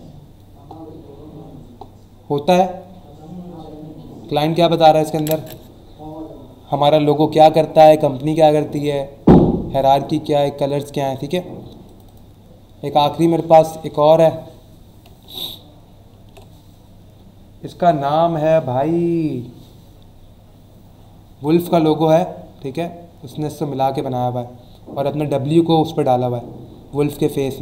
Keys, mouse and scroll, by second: 0.7-1.0 scroll up 1, 1.7-3.4 scroll up 4, 4.1-4.4 scroll up 1, 4.9 scroll up 1, 9.2-9.5 scroll down 1, 10.6 click, 11.8 click, 15.2-15.5 ctrl+scroll up 1, 16.5 scroll up 1, 17.6-18.0 scroll down 2, 19.4-19.8 scroll down 2, 25.5-26.2 scroll up 2, 26.6-26.9 scroll up 1, 27.2-27.6 scroll up 3.